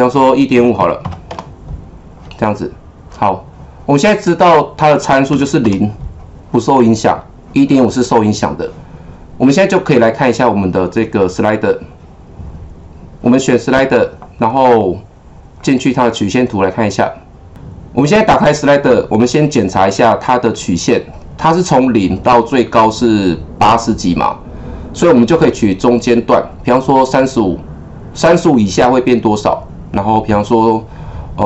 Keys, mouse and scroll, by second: 0.5 KP_1, 1.0 KP_5, 1.3 Return, 4.7 click, 5.3 KP_0, 5.6 Return, 9.6 click, 11.0 click, 15.6 click.